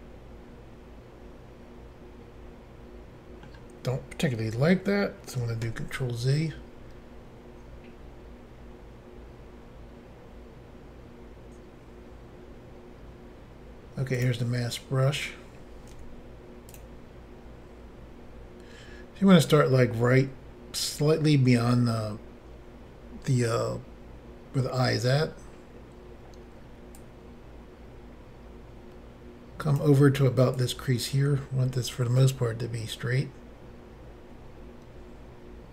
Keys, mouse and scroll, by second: 5.7 ctrl+z, 14.2 click, 14.2 click, 15.9 f, 16.7 click, 27.0 click, 30.6 click.